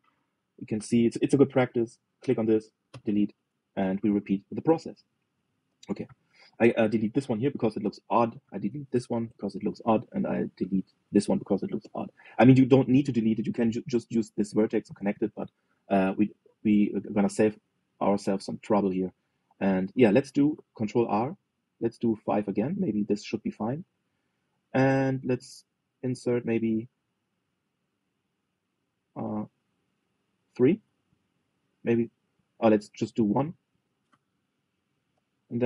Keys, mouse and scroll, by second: 0.1 click, 3.6 Delete, 4.6-6.8 shift+middle drag, 6.8 click, 7.9 Delete, 9.1 click, 10.8 click, 11.1-12.5 middle drag, 12.5 Delete, 14.4 click, 15.9 click, 16.6 Delete, 17.7 scroll down 1, 18.3-21.1 middle drag, 21.1 ctrl+r, 25.0-27.6 middle drag, 29.6 click, 30.7 middle click, 31.4 ctrl+r.